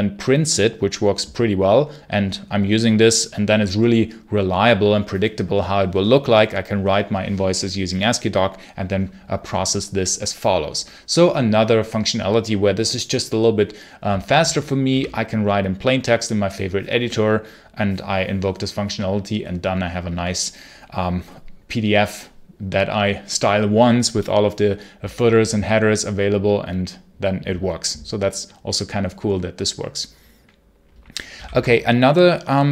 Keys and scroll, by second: 14.7 q, 31.2 ctrl+l.